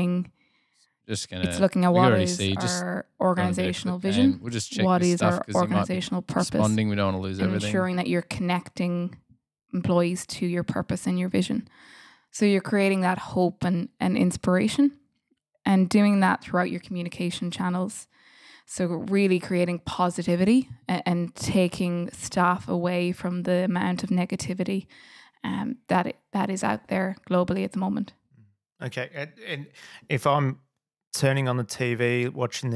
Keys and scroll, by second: 16.4 Delete.